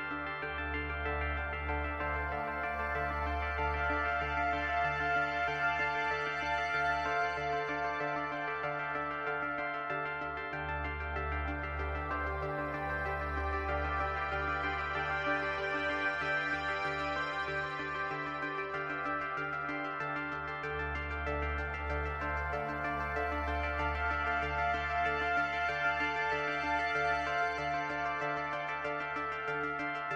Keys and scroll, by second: 5.2 ctrl+z.